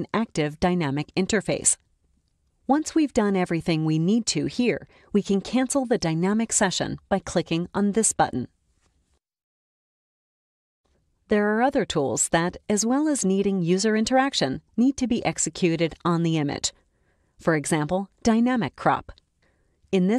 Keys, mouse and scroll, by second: 1.6-4.6 drag, 9.1 click, 18.2 click.